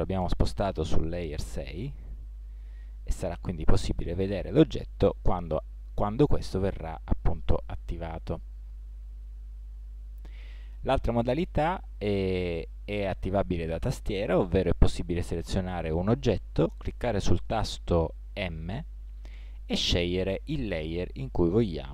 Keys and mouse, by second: 1.8-3.5 drag, 8.6-10.4 drag, 18.3 m.